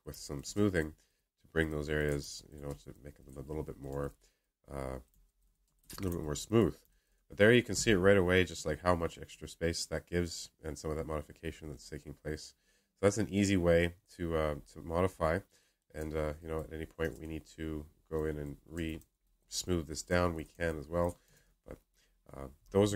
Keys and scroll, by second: 21.2 ctrl+z.